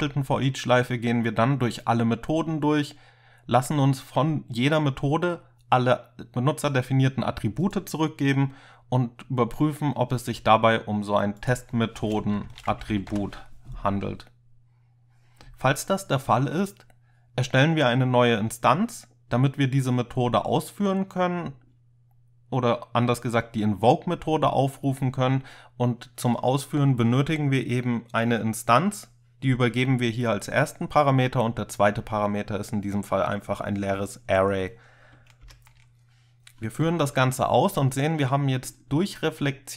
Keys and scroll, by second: 12.3-13.7 typing, 35.5 ctrl+F5.